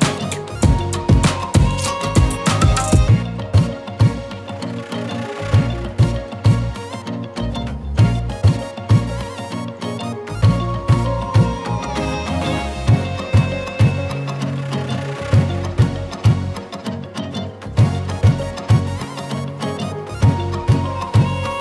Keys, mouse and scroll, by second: 0.7-1.9 alt+shift+drag, 2.2-2.7 scroll up 1, 6.2 shift+click, 7.4 click, 10.0 right click, 11.4 click, 14.3 click, 18.4 Return, 19.9 click.